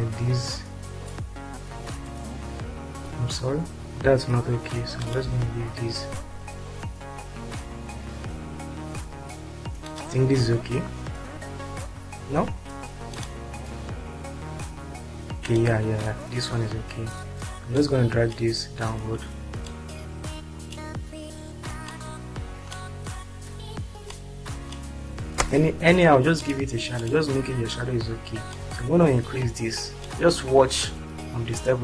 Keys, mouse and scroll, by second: 3.7 ctrl+z, 12.2 ctrl+z, 18.4 click, 19.8-20.8 drag, 22.0 click, 24.1 click, 25.9 space, 27.0 click, 28.5 click, 29.4-30.6 shift+drag.